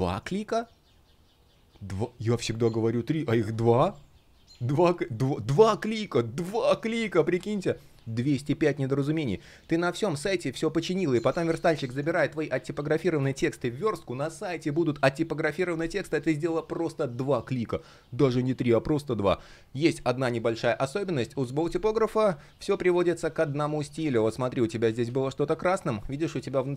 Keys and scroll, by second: 21.5 shift+3, 23.8 super+я, 24.5 super+я.